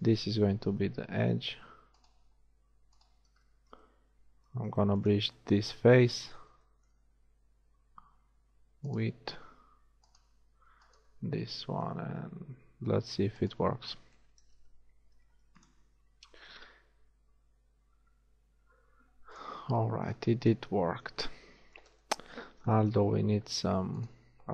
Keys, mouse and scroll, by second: 0.7 f, 15.2 ctrl+shift+e, 16.1 a, 23.4 z.